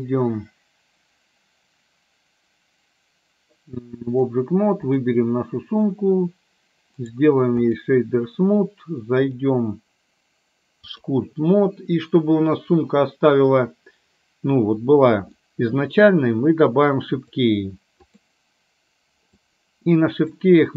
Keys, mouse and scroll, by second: 5.1 click, 7.2 right click, 9.4-11.3 drag, 15.4 middle click, 17.3 click, 19.4 click.